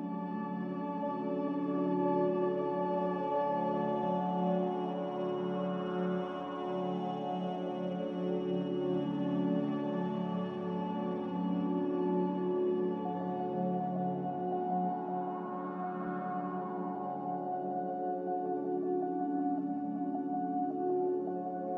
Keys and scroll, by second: 2.0 x, 5.9 z, 11.0 m, 12.0 Escape.